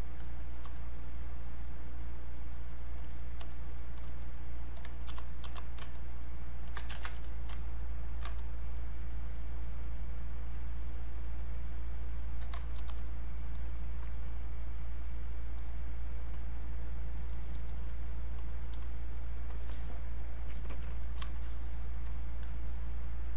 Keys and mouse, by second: 0.8-3.1 shift+drag, 3.1 click, 3.5 shift+click, 5.0 shift+f, 6.2 ctrl+click, 7.0 ctrl+shift+z, 7.3 click, 7.8 ctrl+shift+click, 7.8 ctrl+shift+click, 12.7 shift+f, 13.3 click, 21.4 shift+click, 22.4 click.